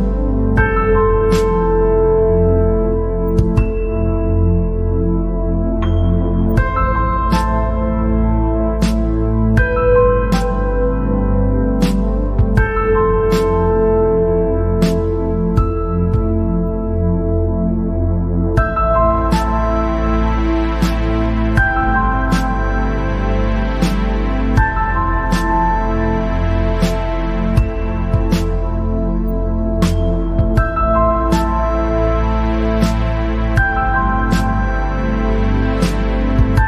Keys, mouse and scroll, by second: 0.5 click, 1.4-2.0 scroll down 6, 2.0 click, 2.4 scroll up 3, 2.7 scroll down 2, 2.8-5.6 middle drag, 5.6 scroll down 1, 5.7-6.3 scroll up 6, 6.6-7.0 scroll down 4, 7.1 scroll up 2, 7.8 scroll down 1, 8.1 scroll up 2, 8.8 scroll down 1, 9.2 scroll up 1, 9.6 scroll down 2, 10.2 middle click, 10.9 scroll down 3, 11.4-11.8 scroll up 6, 12.1 click, 13.7 click, 14.5 click, 15.5 click, 16.3 click, 17.1 click, 17.5-17.9 scroll down 4, 18.2 scroll up 2, 18.6 middle click, 19.5 scroll down 4, 20.0 scroll up 3, 24.8 shift+a, 26.3 g, 28.9 KP_7, 30.2 g, 32.3 scroll down 4, 32.5 middle click, 33.2-34.1 scroll up 7, 34.1 scroll down 1, 34.1-36.3 middle drag, 36.3 scroll down 2.